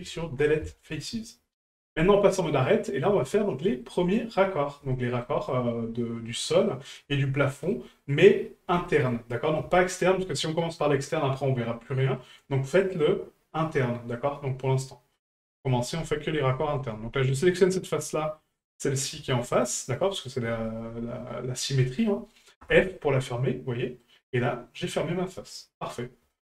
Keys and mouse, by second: 1.8-2.6 drag, 2.6-2.9 middle drag, 3.3 shift+middle drag, 3.8-4.2 middle drag, 4.9 shift+middle drag, 5.5-6.3 middle drag, 6.7 middle drag, 7.1-7.7 shift+middle drag, 8.0 middle drag, 8.8 shift+middle drag, 9.7 shift+middle drag, 12.2 middle drag, 14.1-14.6 middle drag, 15.1-15.4 middle drag, 15.7 shift+middle drag, 16.6 shift+middle drag, 17.4 right click, 17.9 middle drag, 18.3 middle drag, 19.5 shift+right click, 19.8-20.4 shift+middle drag, 23.3-24.0 middle drag, 26.3 shift+middle drag.